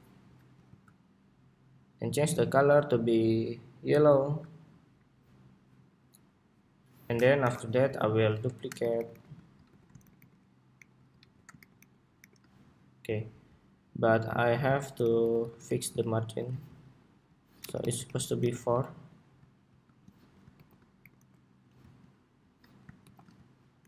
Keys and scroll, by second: 0.4 super+z, 7.1 super+=, 8.0 super+d, 9.7 super+d, 14.8 alt+Left, 15.3 alt+Left, 16.2 alt+Left, 17.7 alt+Left, 18.4 alt+Right, 20.3 alt+shift+Left, 21.1 alt+Right, 23.5 alt+Right.